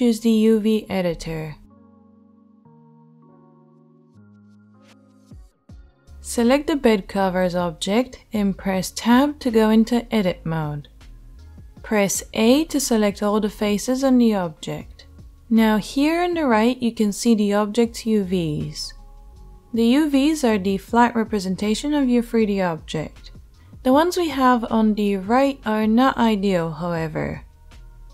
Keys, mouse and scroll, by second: 7.1 Tab, 13.3 a.